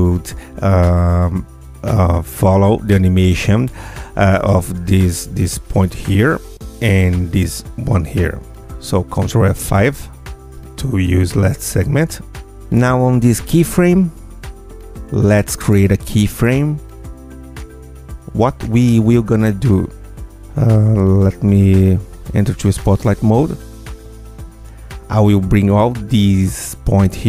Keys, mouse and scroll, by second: 1.1 ctrl+click, 2.8 F8, 4.6 ctrl+click, 6.7 ctrl+click, 8.4 ctrl+F5, 12.8 click, 13.7 click, 14.4 ctrl+shift+F2, 15.9 ctrl+F2, 17.2 click, 18.2 click, 19.0 ctrl+click, 19.5 ctrl+click, 20.5 ctrl+click, 22.4 click, 23.1 click, 25.4 click, 26.5 g.